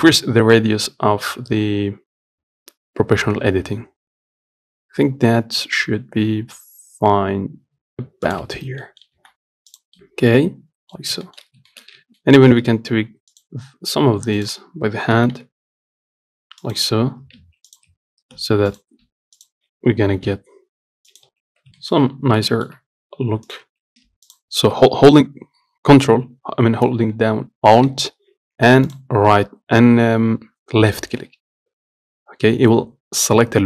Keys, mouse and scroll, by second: 8.8 Tab, 9.1 middle click, 9.4 z, 10.0 click, 10.2-11.2 middle drag, 11.2-12.0 scroll up 2, 11.5 shift+middle click, 12.0 shift+middle click, 12.2 Tab, 12.5 middle click, 12.7-13.6 scroll up 1, 13.6 alt+click, 14.6 alt+shift+click, 15.4 g, 17.2 scroll down 2, 17.5 scroll up 2, 17.6 Tab, 17.9 click, 18.1 Tab, 19.0 alt+click, 19.6 alt+shift+click, 20.3 g, 21.5 Tab, 21.7 scroll down 2, 22.1 shift+middle click, 22.8 shift+middle click, 23.4-23.7 scroll up 1, 23.7 click, 23.9 Tab, 24.6-25.8 alt+drag, 29.1 alt+click.